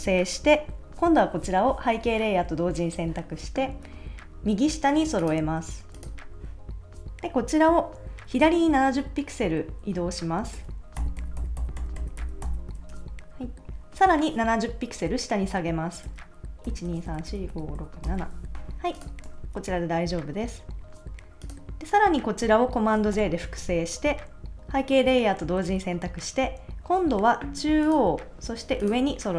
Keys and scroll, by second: 11.0 shift+Left, 16.7 shift+Down, 19.3 super+s, 23.1 super+j.